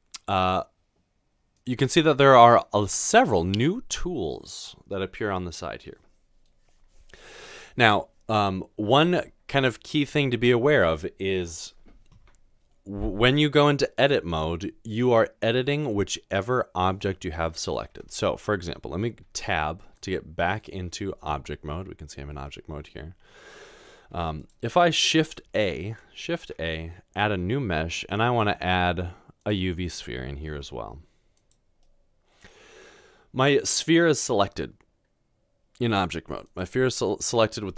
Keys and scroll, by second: 18.0 Tab, 20.4 Tab, 26.2 typing, 30.5 g.